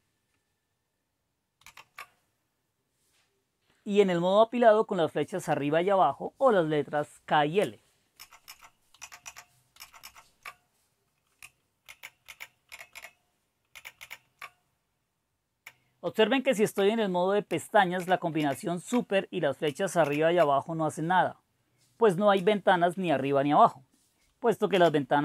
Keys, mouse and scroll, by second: 1.6 super+s, 8.2 super+Up, 8.5 super+Up, 9.0 super+Down, 9.2 super+Down, 9.8 super+Up, 10.0 super+Up, 11.9 super+k, 12.3 super+k, 12.7 super+l, 12.9 super+l, 13.7 super+k, 13.9 super+k, 15.6 super+k, 18.0 super+l, 18.4 super+l, 20.0 super+k, 24.7 super+ñ.